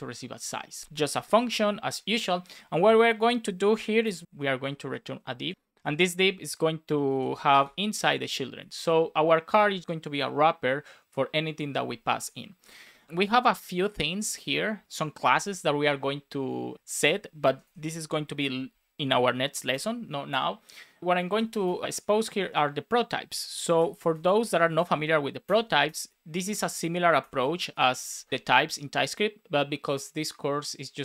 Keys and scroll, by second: 0.4 Down, 0.8 space, 1.5 shift+/, 1.8 BackSpace, 4.2 shift+;, 4.8 shift+;, 5.3 Left, 5.5 Right, 5.7 Return, 6.2 shift+[, 8.0 Up, 8.5 super+s, 12.0 Up, 12.6 Escape, 12.8 Up, 14.1 Left, 16.7 Down, 16.9 Up, 17.4 Down, 17.9 Down, 19.6 Return, 21.2 shift+c, 23.7 shift+t, 24.4 space, 25.4 shift+[, 25.8 Return, 27.1 Return, 27.5 shift+;, 27.7 space, 27.9 BackSpace, 28.3 space.